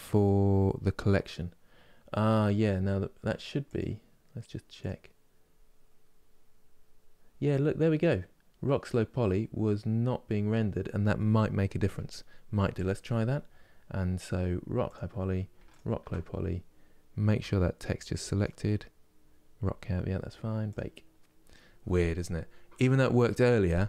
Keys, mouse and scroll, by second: 5.6-14.6 drag.